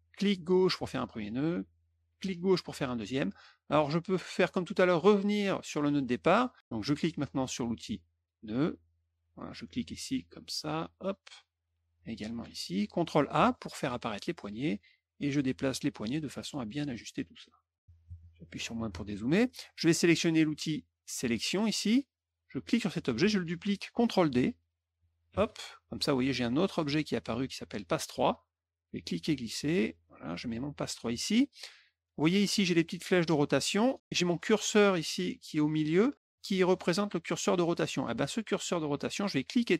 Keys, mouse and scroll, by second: 0.1 click, 2.1 click, 8.1 click, 9.4-10.9 drag, 11.9 click, 14.6 click, 16.0 click, 17.4 click, 18.7 middle click, 21.3 click, 22.6 click, 25.2 ctrl+d, 29.0-31.0 drag, 33.1 click, 39.5-39.7 drag.